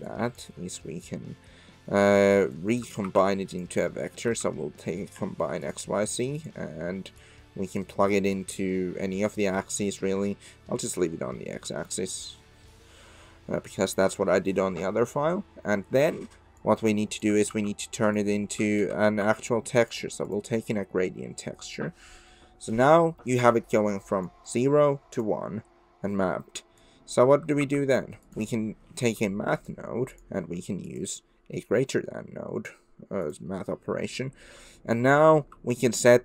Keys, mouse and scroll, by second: 0.1 click, 2.0 middle click, 2.5 click, 3.0 shift+a, 7.2 click, 8.4 click, 10.4 middle click, 16.7 click, 17.5 shift+a, 26.8 click, 27.6 shift+a, 30.9-33.4 drag, 36.1-36.2 shift+drag.